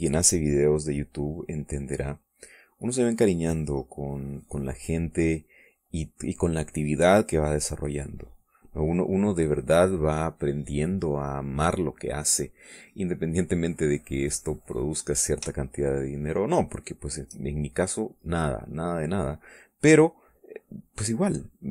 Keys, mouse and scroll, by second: 0.9 middle click, 1.4-3.2 drag, 3.4 middle click, 4.2-9.5 drag, 10.0 middle click, 10.7 middle click, 12.2-13.3 middle drag, 13.4 middle click, 15.4 click, 16.4-18.2 shift+drag, 18.4-19.7 shift+middle drag, 20.2-21.7 drag.